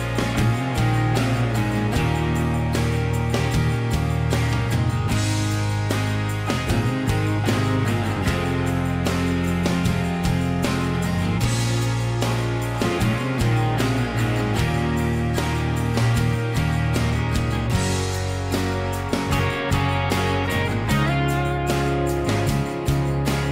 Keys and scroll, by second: 0.7 shift+h, 4.4 |, 17.3 Escape, 18.2 ctrl+h, 19.6 ctrl+h, 20.4 l, 22.1 Escape.